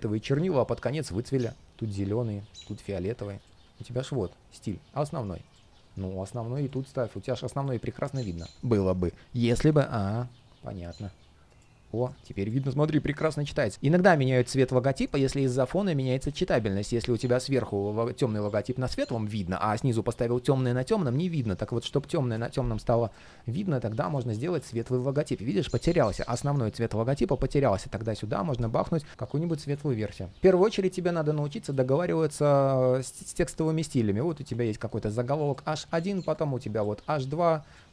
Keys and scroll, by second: 3.6 alt+super+c, 29.1 super+z.